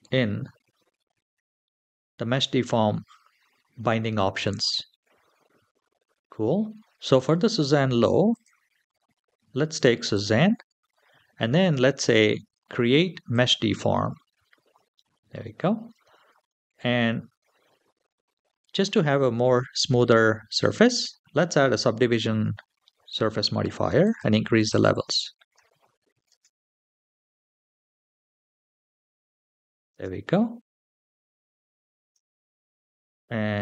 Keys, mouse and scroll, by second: 8.1-10.1 drag, 13.1 click, 18.5-22.0 drag, 22.5-23.8 scroll down 1, 23.8 click, 23.8 scroll down 1, 24.5 click, 26.1 space, 29.7 space, 30.2-31.2 scroll up 5, 31.2-31.9 scroll down 1, 31.9 scroll down 1, 32.1-32.5 shift+middle drag.